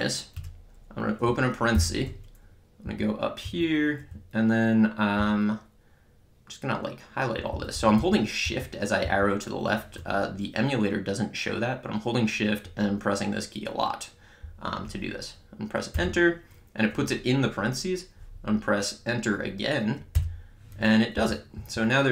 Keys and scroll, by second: 0.4 Return, 1.8 (, 2.9 Up, 3.4 Right, 15.9 Return, 21.2 Up, 21.6 Right.